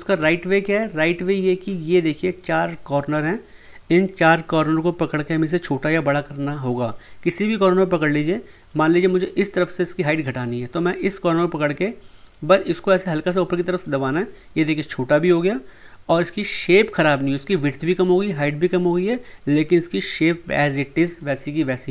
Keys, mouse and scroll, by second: 0.2 ctrl+z, 12.3-16.4 drag.